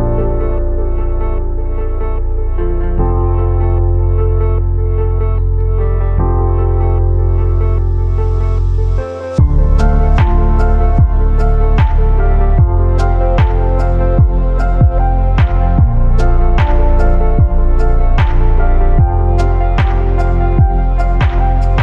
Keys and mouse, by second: 0.5 z, 0.7 click, 2.3 ctrl+r, 4.5 3, 5.5 KP_3, 6.6 shift+middle click, 7.8 e, 9.1-10.2 drag, 10.4 z, 10.7 a, 11.0 1, 11.5 b, 12.9-14.2 drag, 16.1 z, 16.5 click, 17.0 2, 18.5 ctrl+b.